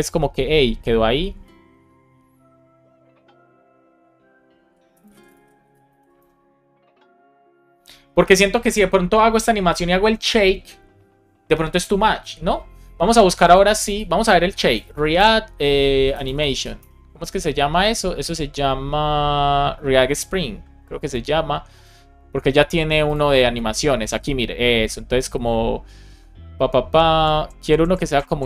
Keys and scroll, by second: 5.8 shift+super+Left, 6.1 BackSpace, 14.6 shift+r, 15.2 space, 16.7 Return.